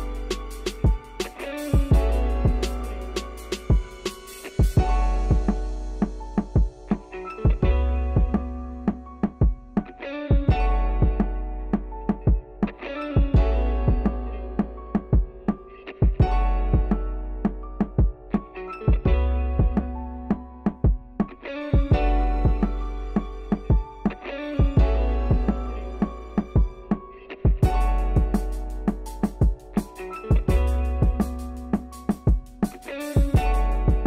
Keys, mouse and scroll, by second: 2.7 shift+a, 5.0 middle click, 5.7 scroll down 4, 5.8 shift+middle click, 6.1-6.5 scroll up 4, 6.5-7.7 shift+middle drag, 7.7 scroll up 1, 7.8 middle click, 8.0-8.4 scroll down 1, 8.4 click, 9.3-10.7 middle drag, 10.7 click, 11.3 shift+a, 12.7-16.9 drag, 16.9 shift+a, 18.1-19.1 drag, 19.8 click, 20.2 shift+a, 21.9-23.7 drag, 23.7 middle click, 24.4 scroll up 2, 24.5 middle click, 24.8 scroll down 2, 25.0-26.0 middle drag, 26.4 click, 27.4 click, 28.0 scroll down 1, 28.3-29.3 middle drag, 29.3 click, 29.7 middle click, 30.8 click, 31.5 click, 31.7 Tab, 32.0 middle click, 32.2 click, 32.7-33.8 middle drag.